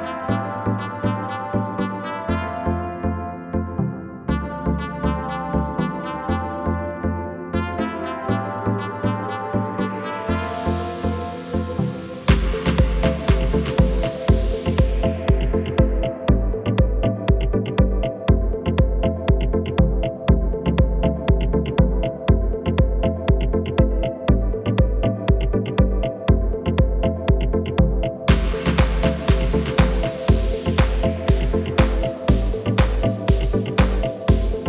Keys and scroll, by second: 0.3 Tab, 6.0 Tab, 14.3 shift+s, 20.1 r, 25.1 KP_9, 28.5 Return.